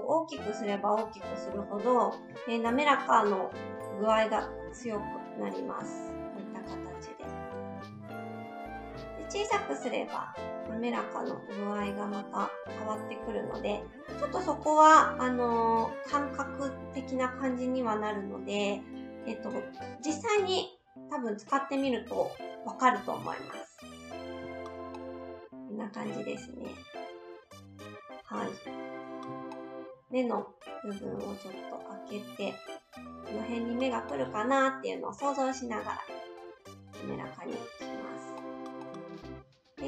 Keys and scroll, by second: 2.3 shift+s, 3.7 shift+s, 7.9 ctrl+z, 8.9 s, 17.9 shift+s, 34.5 shift+s.